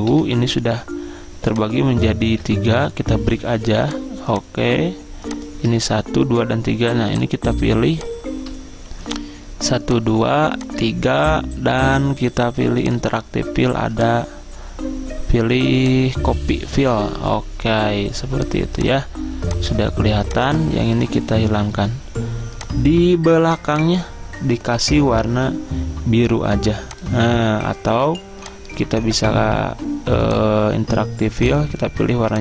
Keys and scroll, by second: 0.2 Delete, 2.4 ctrl+z, 5.9 ctrl+z.